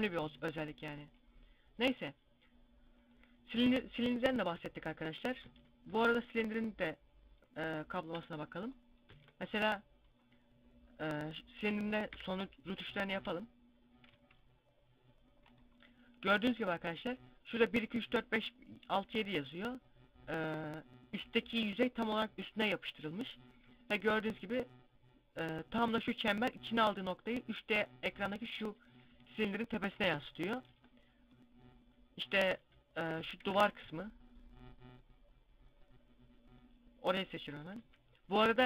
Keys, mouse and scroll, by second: 2.9 click, 5.3 Tab, 6.4-8.7 drag, 8.9 Tab, 12.0-13.1 drag, 12.0 KP_Decimal, 13.1 a, 14.0 c, 16.6 right click, 30.7 Tab, 32.3 Tab, 33.0 a, 33.4 z, 33.6 c, 37.6-38.6 drag, 37.6 z.